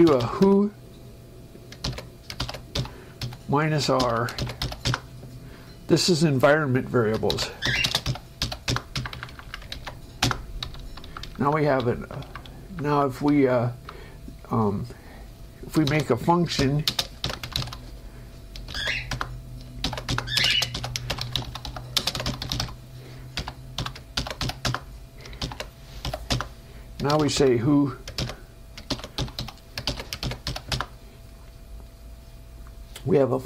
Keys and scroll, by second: 1.4 o, 5.2 Return, 7.4-8.4 typing, 9.0 Return, 9.3 Up, 10.4 ctrl+Right, 10.5 Return, 10.9 Down, 12.2 Up, 13.7 Down, 16.4-18.4 typing, 19.4 Return, 20.2-22.5 typing, 20.4 Return, 24.9 Return, 26.7 Return, 31.0 Return.